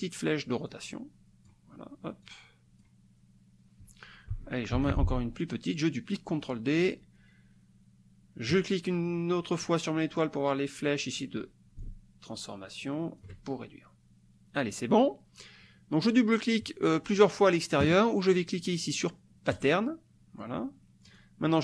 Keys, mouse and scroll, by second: 0.7 click, 2.3 click, 4.7 ctrl+d, 6.3 click, 8.5 click, 11.8-13.2 ctrl+shift+drag, 19.6 click, 21.1 click.